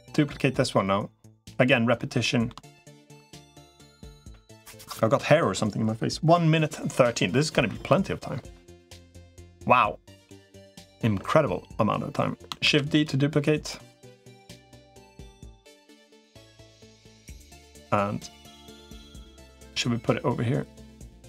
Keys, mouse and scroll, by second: 0.0 middle click, 1.2 middle click, 2.0 middle click, 9.1 middle click, 12.4 shift+d, 13.6 click, 15.0-19.0 drag, 19.6-21.2 drag.